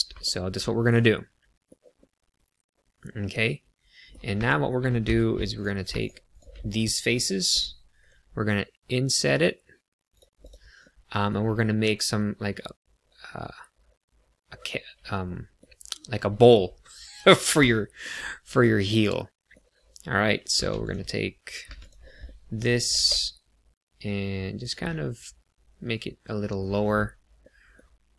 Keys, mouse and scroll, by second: 0.2 shift+middle click, 0.7 middle click, 1.9 middle click, 4.3 shift+middle click, 5.0 3, 5.5 click, 5.9 shift+click, 6.2 click, 6.5 middle click, 8.0 i, 10.0 click, 10.5 click, 10.7 middle click, 15.3 middle click, 18.1 middle click, 18.8 middle click, 20.5 2, 20.8 click, 21.6 3, 21.7 click, 22.2 middle click, 22.9 g, 22.9 z, 24.6 click, 24.9 middle click, 27.4 middle click.